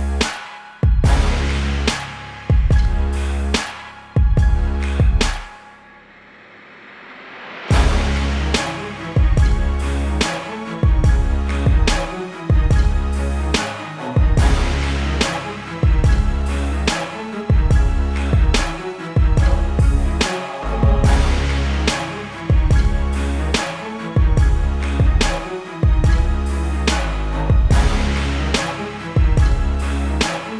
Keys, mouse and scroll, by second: 0.0 click, 3.9 v, 4.2 ctrl+KP_0, 4.8 Tab, 5.1 click, 7.1 b, 7.8 click, 8.7 [, 9.0 click, 12.3 [, 12.4 click, 12.9 space, 13.3 click, 13.7 ], 13.9 click, 16.4 b, 16.6 click, 17.8 -, 18.4 ctrl+t, 19.9 click, 20.7 click, 21.0 Return, 21.6 ctrl+t, 22.0 alt+click, 22.3 click, 23.0 Return, 23.4 v, 27.4 click.